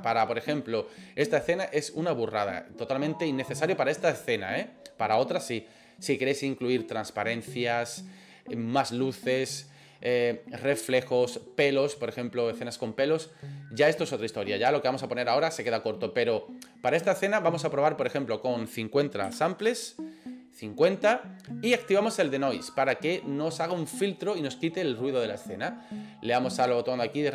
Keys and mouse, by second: 18.2-20.4 drag, 26.7 click.